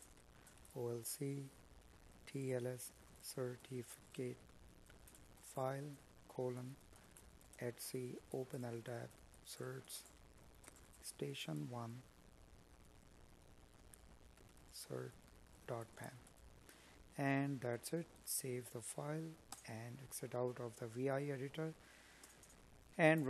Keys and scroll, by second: 7.6 Escape, 16.1 space, 20.9 space, 21.7 space.